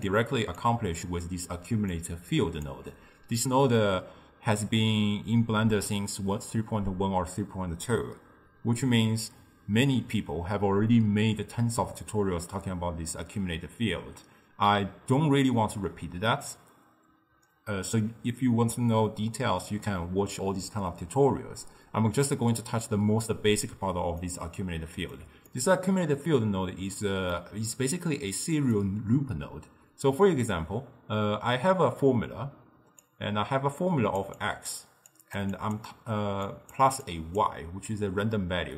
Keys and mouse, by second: 0.0-2.8 typing, 0.7 click, 2.0-2.7 drag, 24.3-30.4 middle drag, 32.8 d, 33.1-34.3 drag, 34.3-38.7 typing, 34.5 click, 35.2 click, 35.6 click, 36.5 click, 37.1 click.